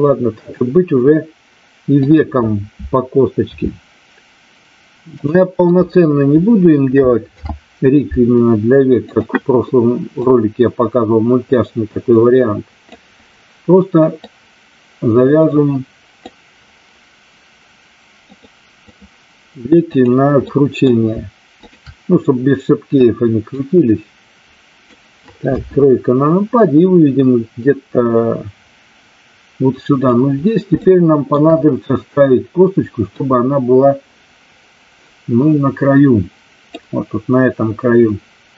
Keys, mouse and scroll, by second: 2.1 click, 3.5 e, 7.3 alt+p, 10.3-12.9 drag, 14.1-16.3 drag, 18.3 click, 19.9 click, 20.4 middle click, 21.5 shift+click, 23.5-24.9 drag, 25.4 KP_3, 26.7-30.1 drag, 30.8 shift+middle click, 33.1-36.8 drag.